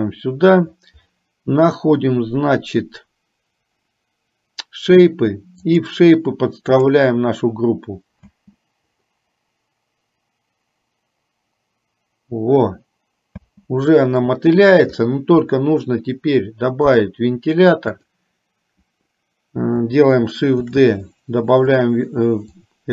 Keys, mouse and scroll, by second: 5.8-7.1 drag, 8.3 space, 13.4 space, 14.3 middle click, 17.9 click, 20.8 shift+d, 22.6-22.9 drag.